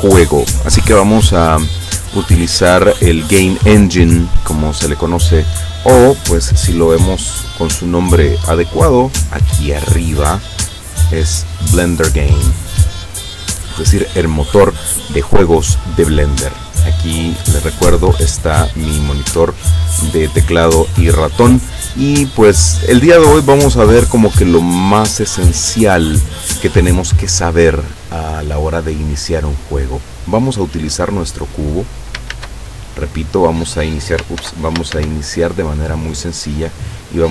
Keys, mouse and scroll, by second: 10.5 click, 12.2 click, 16.6-18.2 drag, 31.3 click, 32.4 shift+a, 33.3 click, 34.5 ctrl+z, 35.0 ctrl+shift+a.